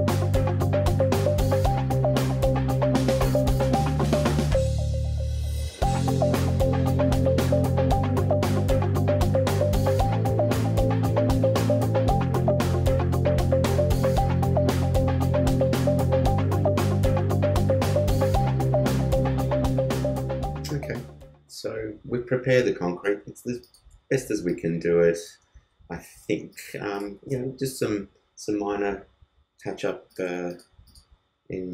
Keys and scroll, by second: 12.7 alt+space, 16.0 super+z, 17.1 alt+space, 21.4 super+-, 22.1 super+space.